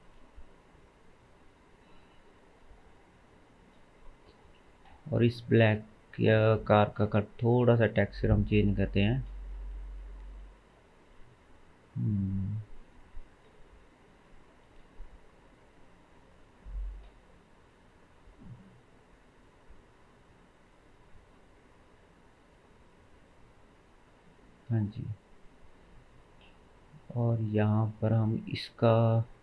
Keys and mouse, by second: 0.4 g, 3.7-4.6 middle drag, 4.7-5.7 middle drag, 14.3-14.7 shift+middle drag, 22.2-24.9 middle drag, 25.0-26.5 middle drag, 26.5 click, 26.5-27.1 middle drag, 27.1 click, 27.3-29.4 middle drag.